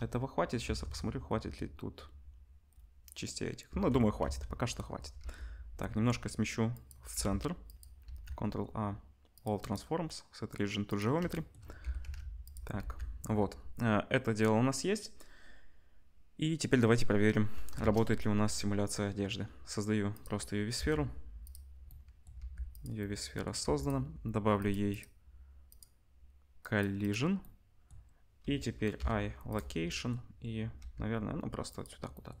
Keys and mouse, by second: 0.6 Tab, 4.2 ctrl+s, 5.2 g, 7.1 g, 8.0-9.7 ctrl+middle drag, 8.0 ctrl+a, 9.7-12.7 right drag, 11.8 g, 12.7-32.4 ctrl+drag, 12.8 ctrl+s, 17.7 shift+a, 20.7 g, 22.4 g, 23.6 g, 24.6 middle click, 24.6 right click, 26.6 middle click, 26.6 right click, 27.0-31.8 middle drag, 27.0-31.8 right drag, 28.9 i, 30.8 g.